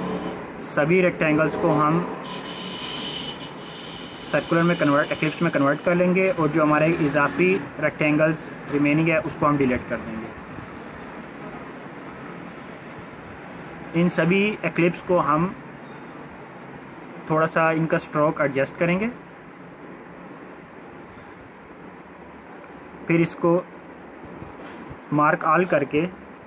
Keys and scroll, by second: 9.3 Delete, 10.4 ctrl+-, 10.7 ctrl+-, 10.9 ctrl+-, 11.3 ctrl+-, 12.7 ctrl+a.